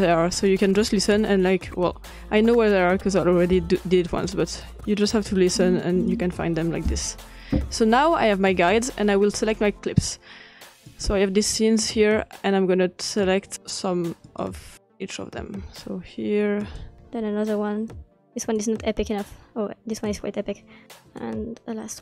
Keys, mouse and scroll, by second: 3.6 *, 6.9 *, 10.9-12.5 drag, 13.2-19.1 drag, 19.5 click, 20.1 middle click, 20.2 click, 21.1-21.9 drag.